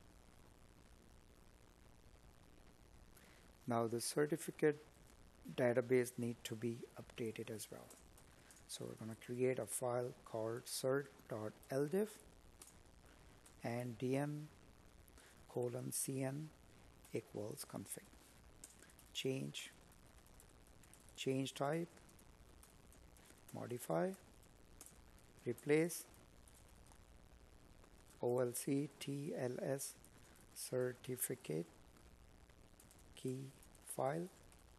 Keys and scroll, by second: 0.5 space, 7.0 space, 11.9 Tab, 13.7 space, 14.8 space, 16.4 Tab, 18.2 space, 26.9 Tab.